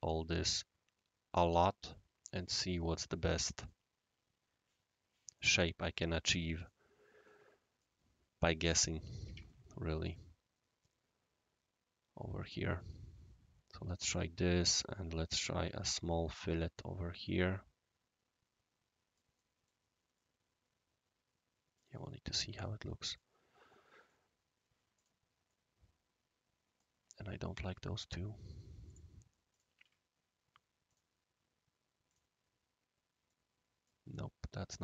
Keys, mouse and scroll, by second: 2.6 click, 3.6 click, 5.3 click, 6.6 click, 7.2 right click, 8.6 click, 10.1-12.8 shift+right drag, 14.1 shift+click, 14.7 click, 15.4 click, 15.6 1, 15.7 Tab, 16.4 click, 17.3-19.2 right drag, 19.3 middle click, 20.1-21.8 right drag, 22.6 right click, 23.4 scroll down 1, 23.4 scroll up 1, 23.7-24.1 middle drag, 24.9 click, 25.5-26.8 right drag, 28.8 click, 29.5 shift+click, 29.7 1, 29.7 Tab, 30.8 shift+click, 32.0 click, 33.2-33.9 right drag.